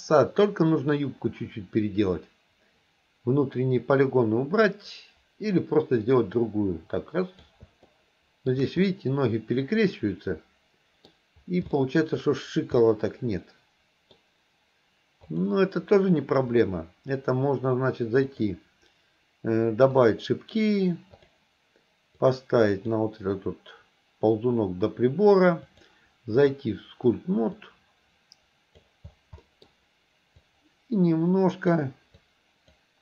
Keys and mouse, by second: 7.9-8.5 shift+middle drag, 8.9-11.2 middle drag, 11.8 shift+middle drag, 12.9-14.1 middle drag, 15.3 click, 16.6 click, 18.3 click, 20.0 click, 21.2 click, 22.3 click, 25.8-26.6 drag, 27.6-28.9 drag, 29.4 middle click, 30.4-31.8 drag, 32.3 click.